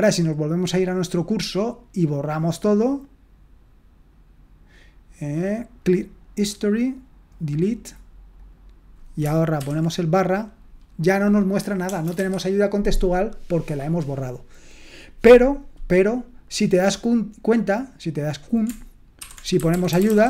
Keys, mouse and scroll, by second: 12.2 Escape, 19.5-20.2 typing.